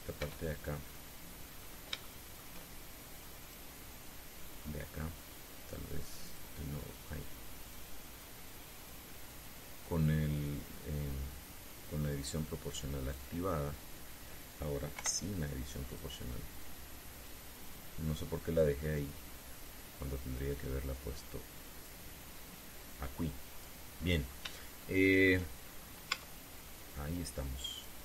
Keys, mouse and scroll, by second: 0.9 z, 2.3-2.7 scroll up 3, 2.7 shift+middle click, 4.1 click, 7.0 click, 8.3 right click, 10.1 click, 10.9-12.0 scroll down 3, 15.7 o, 16.6 click, 17.3 click, 19.3-20.6 drag, 21.3-22.7 drag, 23.5 click, 24.7-25.1 scroll down 1, 25.3 shift+middle click, 26.3-26.7 shift+scroll up 1, 26.8 Tab, 27.5-28.0 scroll down 1.